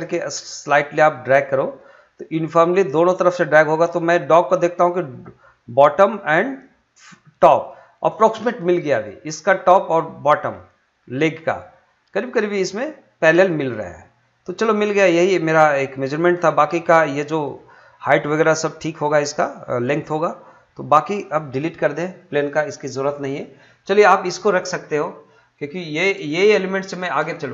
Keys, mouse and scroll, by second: 7.6 shift+click, 13.9 middle click, 15.0 scroll down 1, 15.3 scroll up 1, 16.4 scroll down 1, 16.6 middle click, 20.5 click, 24.1 scroll up 1, 24.2 middle click, 24.6-25.2 scroll down 1, 25.7 scroll up 1, 25.8 shift+middle click, 26.6 shift+middle click, 27.3 shift+middle click.